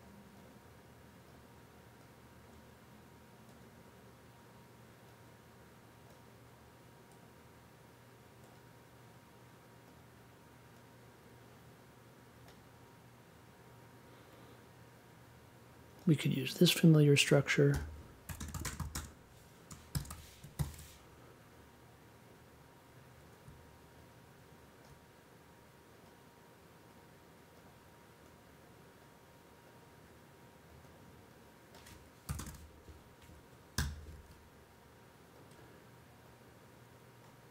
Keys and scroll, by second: 17.7-20.5 typing, 32.0-33.7 typing.